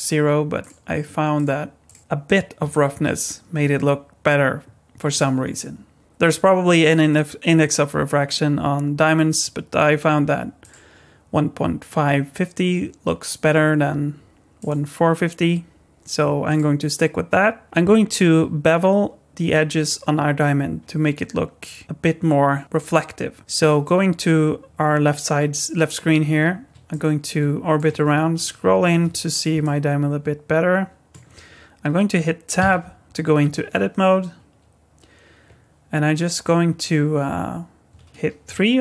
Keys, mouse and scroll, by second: 0.6 click, 10.6 click, 14.6 click, 16.5 click, 26.9 middle click, 28.1-28.9 scroll up 8, 29.1 shift+middle click, 29.6 middle click, 32.6 Tab.